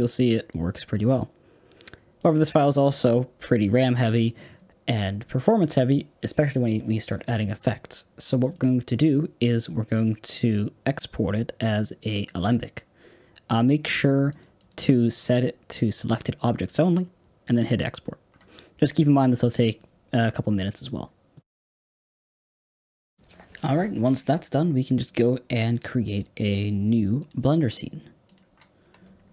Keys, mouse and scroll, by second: 4.0 scroll up 4, 4.5-12.3 middle drag, 12.3 click, 24.1 click.